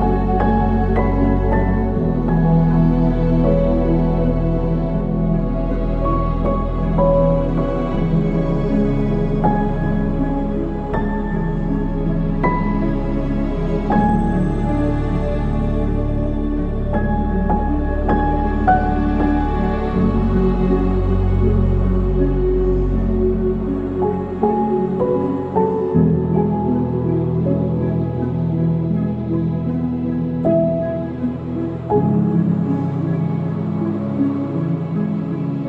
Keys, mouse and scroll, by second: 28.8 ctrl+s.